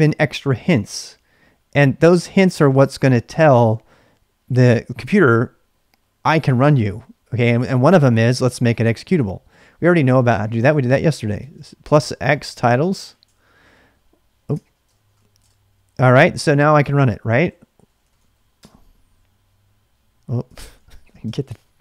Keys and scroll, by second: 9.6-13.3 typing, 14.3-15.6 typing, 17.2-18.6 typing, 20.3-21.8 typing.